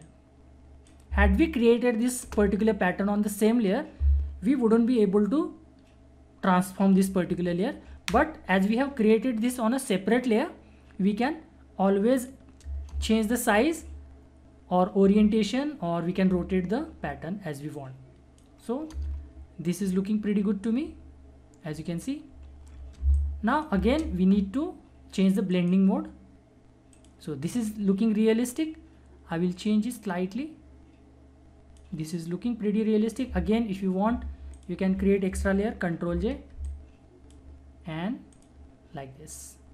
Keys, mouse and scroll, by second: 2.2 Return, 11.2-12.9 drag, 12.9 Return, 13.4 ctrl+=, 15.1 -, 16.2 ctrl+-, 17.7 click, 18.9 Return, 20.8 =, 21.7 ctrl+=, 23.0 space, 23.1 click, 23.5 space, 25.5 click, 25.5 click, 29.6-34.2 drag, 34.5 click, 36.0 ctrl+j, 36.6-38.3 drag.